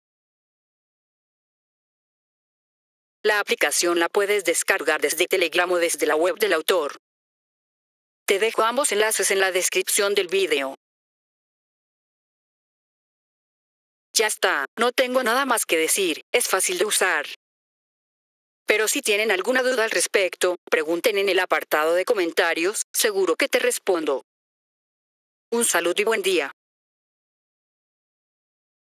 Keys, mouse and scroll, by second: 1.9 F3, 2.8 click, 12.5 F3, 13.7 click, 28.8 click.